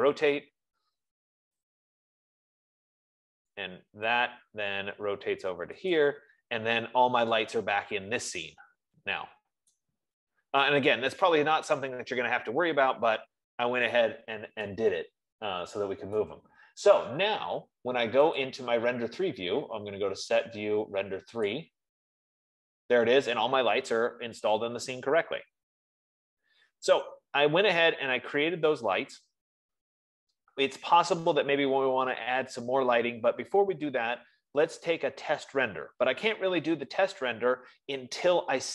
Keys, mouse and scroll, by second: 0.0-0.8 typing, 2.0 click, 4.0 click, 4.0 typing, 4.7-5.7 scroll, 6.5 click, 9.0-9.5 scroll, 10.6 right click, 13.0 Escape, 14.9 scroll, 17.2 right click, 18.9 click, 22.1 click, 33.5 F15.